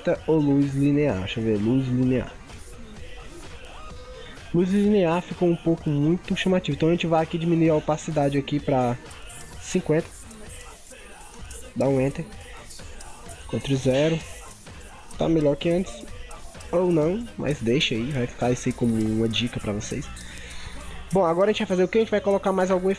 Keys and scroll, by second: 13.6 ctrl+0, 14.0 ctrl+=, 14.8 ctrl+0.